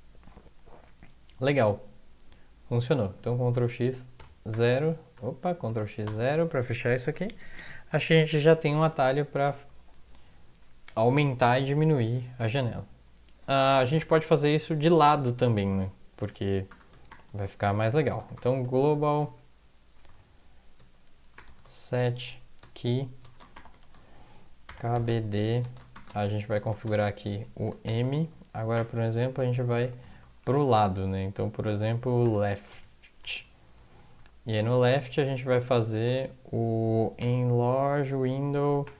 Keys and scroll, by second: 3.1 ctrl+x, 4.1-6.0 typing, 5.1 ctrl+x, 5.6 ctrl+x, 7.0 Up, 7.2 Up, 7.4 Up, 7.5 Up, 7.7 Up, 7.9 Up, 8.0 Up, 8.2 Up, 8.5 Up, 8.7 Up, 8.9 Up, 9.3 Down, 9.5 Down, 9.9 End, 16.7 Return, 17.1-20.0 typing, 17.7 Left, 20.8 Tab, 21.1-22.1 typing, 22.6 Tab, 23.2-28.7 typing, 24.1 Left, 29.8-30.4 typing, 32.0-34.5 typing, 36.0-38.9 typing.